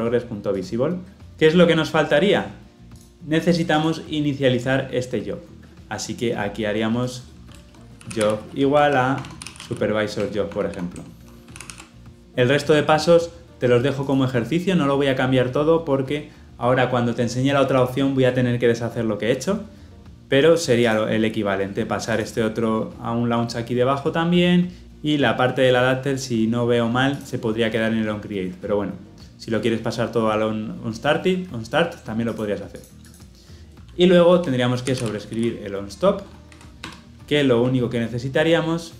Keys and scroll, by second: 10.2 Return, 11.5 ctrl+alt+l, 11.6 ctrl+alt+o, 36.8 Return.